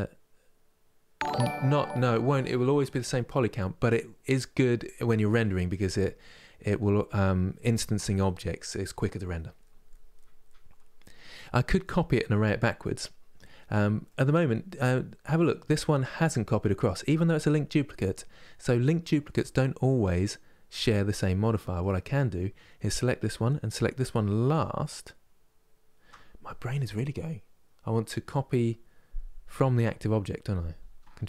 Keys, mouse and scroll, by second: 14.4 click, 14.9-18.0 middle drag, 21.2-24.2 middle drag, 24.2-27.2 shift+drag, 31.0 ctrl+l.